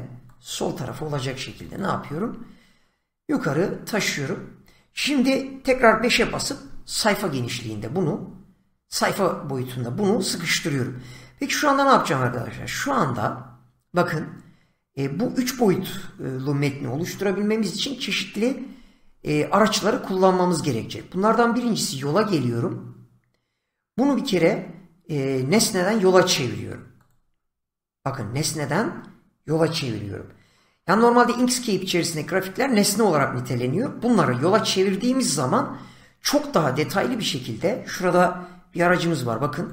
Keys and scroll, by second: 6.0 5, 38.5 <.